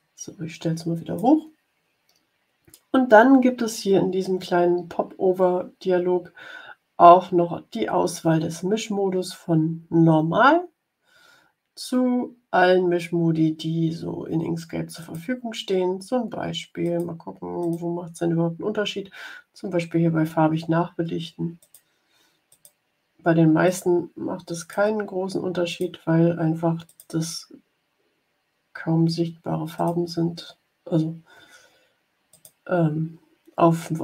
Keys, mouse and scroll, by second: 14.9 click, 16.9 click, 17.8 click, 21.5 click, 22.4 click, 23.6 click, 24.5 click, 25.6 click, 26.8 click, 29.7 click, 32.2 click.